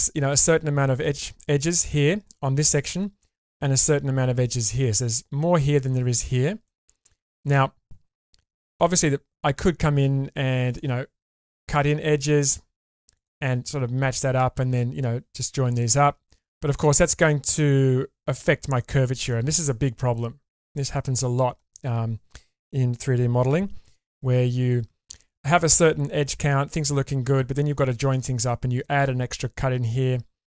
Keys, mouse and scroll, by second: 6.3-6.6 scroll down 3, 6.6 middle click, 8.8 k, 9.2-9.6 scroll up 2, 16.5 middle click, 18.8 middle click, 20.4 scroll down 1, 21.0 middle click.